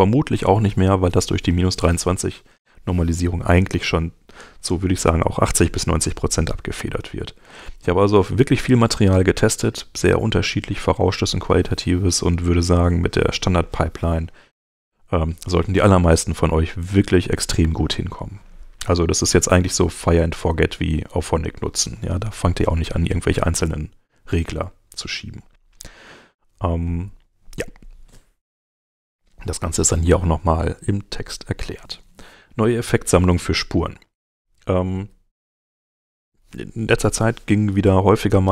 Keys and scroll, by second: 24.6 super+Tab, 34.0 super+Tab.